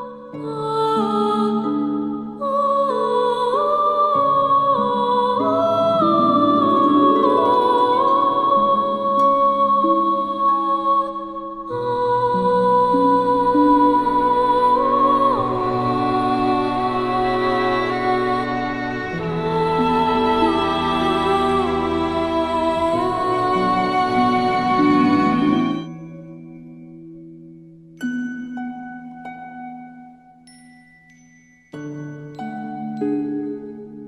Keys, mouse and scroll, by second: 10.8 click, 11.7-15.3 shift+drag, 17.9-18.5 drag, 20.8-22.0 alt+scroll down 5, 22.5 click, 23.7 alt+scroll up 1, 24.4 click, 25.2 ctrl+shift+], 26.1-26.5 alt+scroll down 1, 26.6 space, 26.8-28.2 drag, 30.0-32.0 alt+drag.